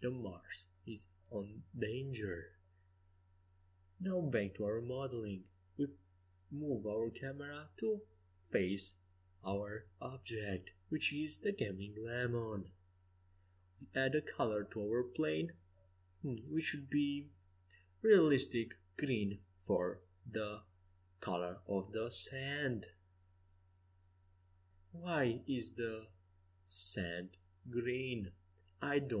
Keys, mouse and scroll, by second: 2.1 g, 3.8-5.5 right drag, 5.8-8.3 drag, 11.2-13.6 right drag, 13.6-18.2 drag, 18.2-19.8 middle drag, 19.8 KP_0, 23.7 shift+a, 25.7-27.7 drag, 26.8 s, 28.1-29.2 middle drag.